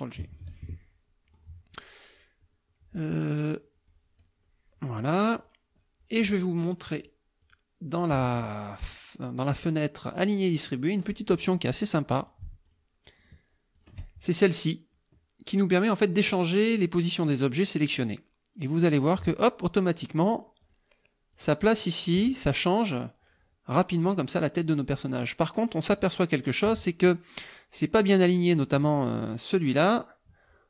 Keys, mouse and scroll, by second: 0.3 ctrl+g, 0.8-1.6 ctrl+drag, 5.4 click, 7.0 click, 7.4 click, 10.1 click, 10.8 click, 12.2 shift+click, 12.6 shift+click, 13.2 shift+click, 13.8 shift+click, 18.8 click, 20.6 click, 21.4 click, 23.7 click, 24.1 click, 24.6 click, 26.0 click, 28.1 click, 28.6 click, 29.9 click.